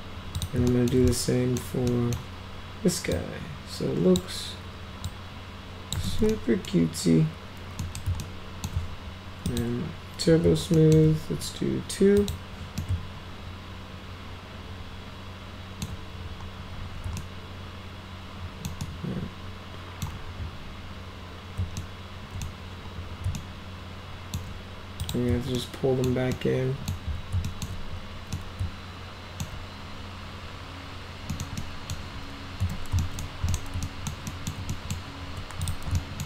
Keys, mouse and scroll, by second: 0.4 click, 0.7 alt+middle click, 1.1 middle click, 1.9 middle click, 3.1-4.2 drag, 5.1 click, 6.0 ctrl+z, 6.3 middle click, 7.8 middle click, 8.2 alt+middle click, 9.5 click, 10.8 alt+middle click, 12.2 click, 12.8-15.8 alt+middle drag, 17.2-18.7 alt+middle drag, 18.8-20.0 alt+middle drag, 21.8 alt+middle click, 23.4 alt+middle click, 25.0 click, 25.6-26.0 alt+middle drag, 26.3 alt+middle click, 27.5 alt+middle click, 28.3-29.4 alt+middle drag, 31.3 middle click, 31.6 middle click, 32.6 z, 33.0 alt+middle click, 33.5 right click, 33.8 alt+right click, 34.3 alt+right click, 34.7 right click, 35.7 ctrl+click, 36.0 alt+middle click.